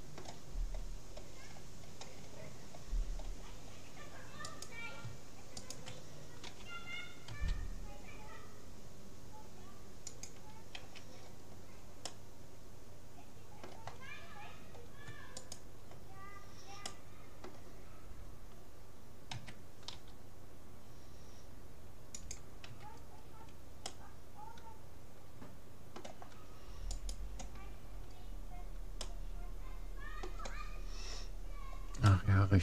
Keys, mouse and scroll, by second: 1.4-3.4 scroll up 1, 3.4-4.0 scroll down 1, 4.4-6.6 right drag, 6.6 g, 10.8 a, 11.2-13.8 middle drag, 14.2-15.2 middle drag, 15.4-16.8 right drag, 17.4-18.6 drag, 19.4 a, 20.0 g, 22.7 a, 23.2 middle click, 23.4-25.6 middle drag, 27.0-28.6 right drag, 28.2-30.6 middle drag, 31.4-32.6 middle drag.